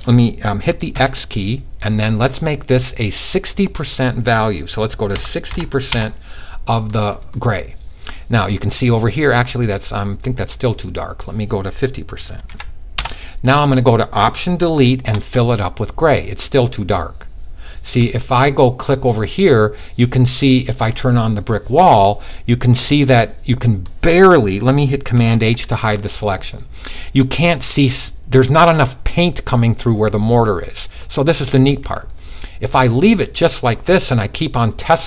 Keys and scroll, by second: 0.3 x, 4.6-5.0 typing, 11.8 typing, 25.1 super+h.